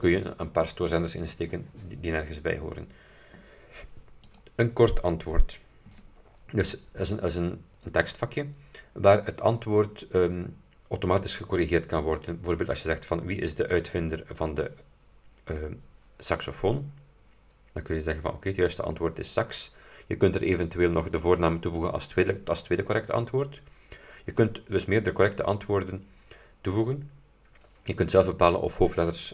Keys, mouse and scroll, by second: 4.4 click.